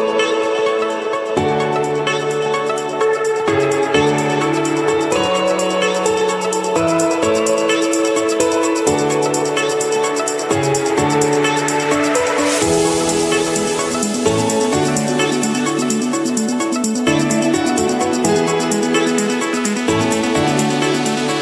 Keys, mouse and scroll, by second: 1.4 click, 1.6-2.3 scroll, 3.2 click, 3.7 click, 4.4 click, 4.6-5.4 scroll, 5.9 click, 6.4-6.7 scroll, 7.4 click, 8.0 Escape, 9.4-10.5 drag, 11.8-12.9 drag, 13.7 click, 14.9 scroll, 16.1-18.3 typing, 20.6-21.4 drag.